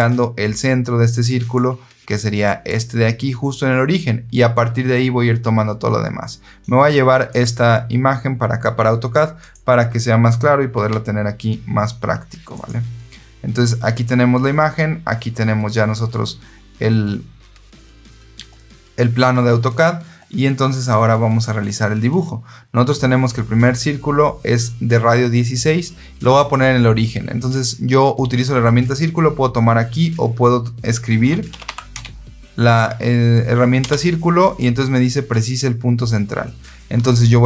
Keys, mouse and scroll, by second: 1.0 click, 1.4-2.6 drag, 7.2 click, 9.3 click, 10.7 ctrl+v, 12.4 click, 30.9-32.4 typing.